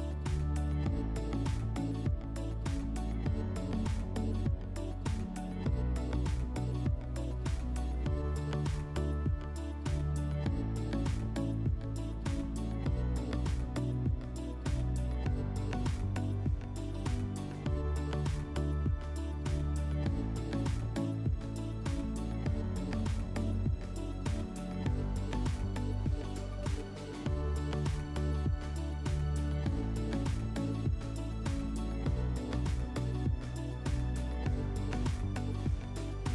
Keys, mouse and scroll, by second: 3.5 click, 5.0 click, 10.0 click, 12.3-13.6 drag, 15.5 ctrl+click, 16.4 click, 17.4-17.9 right drag, 18.2-18.8 drag, 19.2 alt+w, 20.4 click, 21.0 click, 23.0 click, 25.1 click, 27.8 click, 29.5 click, 29.7 click, 29.8 click, 30.2 click, 31.2 click, 32.7 click, 33.7 click, 35.7 alt+w.